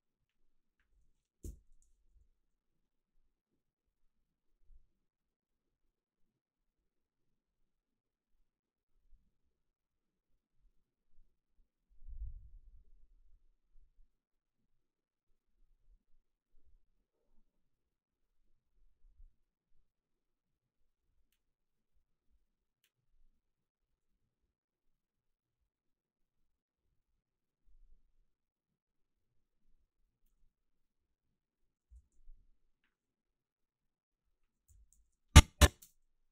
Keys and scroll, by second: 1.4 alt+Up, 31.9 g, 34.7 h, 35.8 space.